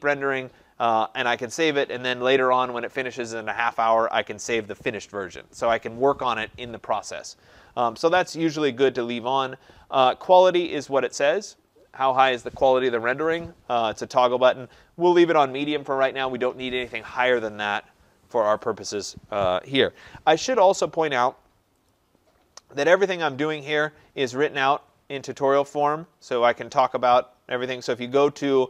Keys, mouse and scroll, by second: 21.9 click, 23.0-23.3 scroll, 23.3-24.3 middle click, 24.0 middle click, 24.1 middle click, 24.2 middle click, 25.1 middle click, 25.2 middle click, 25.3 middle click, 25.5 middle click, 27.7-28.6 scroll.